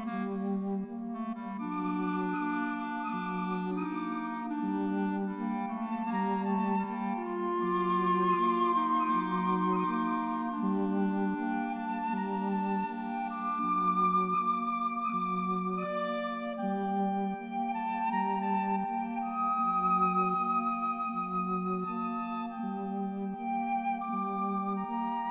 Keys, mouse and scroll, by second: 0.5 right click, 1.6 right click, 2.3 right click, 2.7 right click, 3.2 right click, 3.5 right click, 4.8 right click, 5.8 right click, 6.0 right click, 6.8 right click, 9.3 right click, 11.6 right click, 11.8 right click, 12.0 right click, 12.9 right click, 13.2 right click, 14.9 right click, 15.0 right click, 15.4 right click, 15.7 right click, 16.3 right click, 16.7 right click.